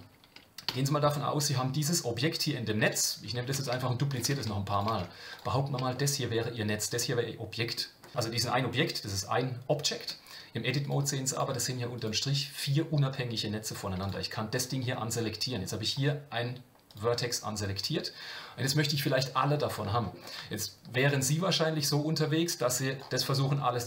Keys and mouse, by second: 0.7 a, 2.8 KP_7, 3.5 shift+d, 5.7 Tab, 5.9-7.7 middle drag, 10.8 click, 12.0 click, 16.9 click, 20.0 shift+middle click, 20.9 middle click, 22.5 click.